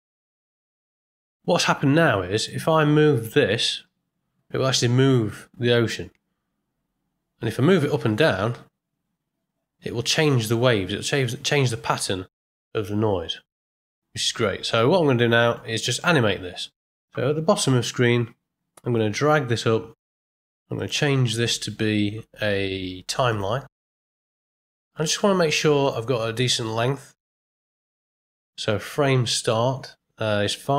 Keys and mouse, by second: 0.1-0.8 middle drag, 2.3 click, 3.0-3.4 middle drag, 3.8 g, 14.6 middle click, 15.4 ctrl+middle click, 19.0-20.4 drag, 20.7-23.3 drag.